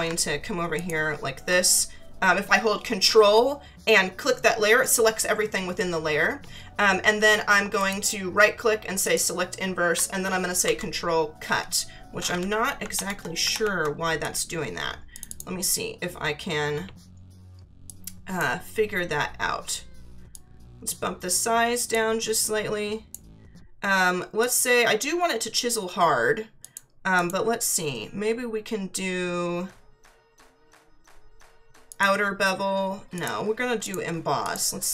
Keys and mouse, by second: 0.7 ctrl+click, 7.8 right click, 9.0 click, 10.6 ctrl+x, 13.5 ctrl+=, 14.2 click, 17.8 click, 20.3 click, 22.4 click, 24.4 click, 26.6 click, 31.9 click, 33.1 click.